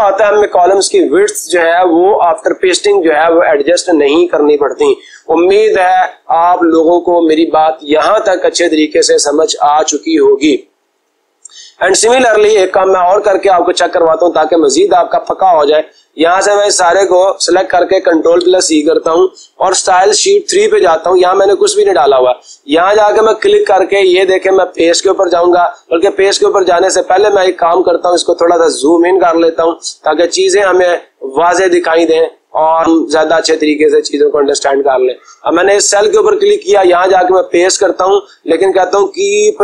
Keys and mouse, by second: 16.9 click, 18.2 ctrl+c, 20.5 click, 21.8 click, 22.8 click, 24.9 click, 27.2 click, 29.3 click, 29.5 click, 29.7 click, 30.1 click, 30.3 click, 30.5 click, 34.9-36.0 drag, 37.9-38.9 drag.